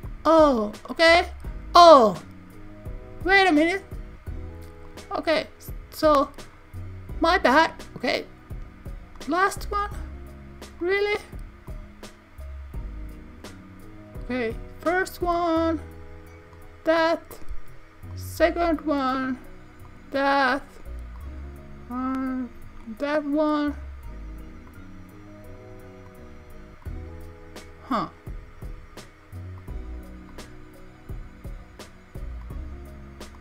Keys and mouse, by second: 0.2 click, 5.0-6.3 drag, 7.7-9.5 drag, 10.8-11.8 drag, 13.5-14.6 drag, 17.3-18.3 drag, 19.2 click, 21.2-22.2 drag, 23.8 click, 26.2-27.0 drag, 29.7 click, 32.4-33.4 drag.